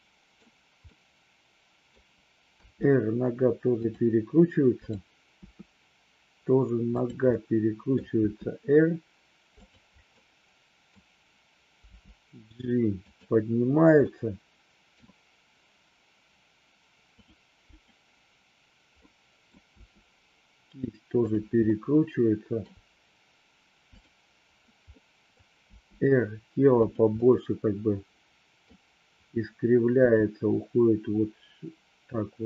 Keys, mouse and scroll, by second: 0.9-1.9 middle drag, 2.6 r, 6.9 click, 7.3 middle click, 9.6 click, 10.2 middle click, 11.8 g, 14.1-14.9 middle drag, 17.7 click, 19.1-19.4 middle drag, 19.7 r, 21.6-22.6 middle drag, 23.8 click, 24.9 middle click, 25.7 r, 26.8 click, 27.2-28.7 middle drag, 29.9 r.